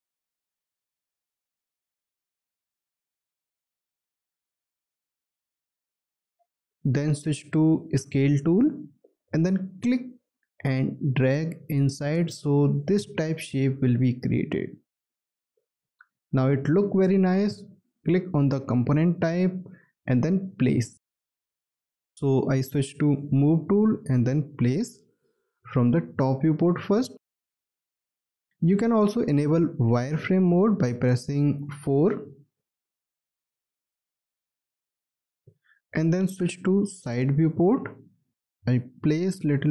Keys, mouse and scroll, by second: 1.1 shift+click, 2.6 shift+click, 4.1 shift+click, 5.3 shift+click, 20.7 w, 25.4 alt+middle click, 26.2 alt+scroll up 1, 26.4 scroll down 1, 27.5 alt+middle click, 31.9 4, 36.2 space, 38.0 scroll down 1.